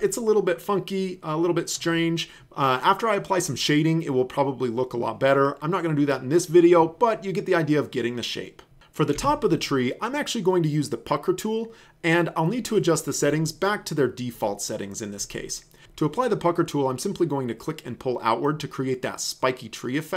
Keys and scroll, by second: 9.2 v, 15.8 ctrl+z.